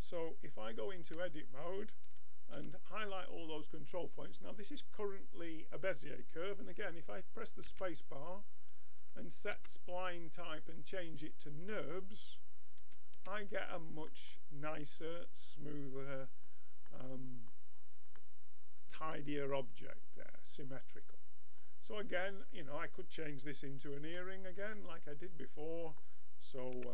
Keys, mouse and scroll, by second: 0.6-2.1 drag, 1.0 Tab, 2.1 a, 2.5 a, 7.7 space, 12.8 a, 13.2 Tab, 14.1 middle click, 17.7-19.9 middle drag, 22.2-24.0 middle drag, 24.0 Tab, 24.7-26.8 middle drag, 26.8 b.